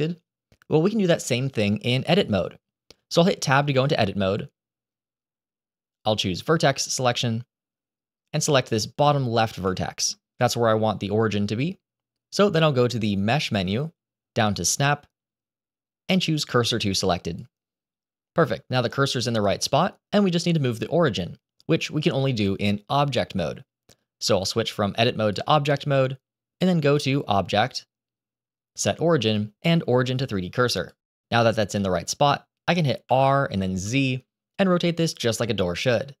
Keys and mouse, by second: 3.3 Tab, 9.7 shift+middle click, 10.3 middle click, 13.2-17.3 drag, 24.2-25.2 drag, 26.8-31.0 drag, 33.0 r, 35.6 ctrl+z.